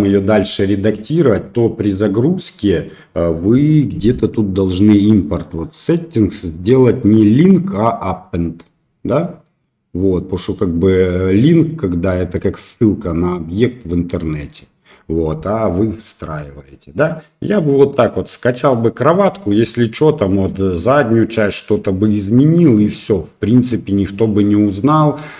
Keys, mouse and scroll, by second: 0.9 middle click, 5.4 click, 10.2 middle click, 13.0-14.3 middle drag, 16.5-17.6 middle drag, 19.9-20.5 middle drag, 21.5-22.7 middle drag.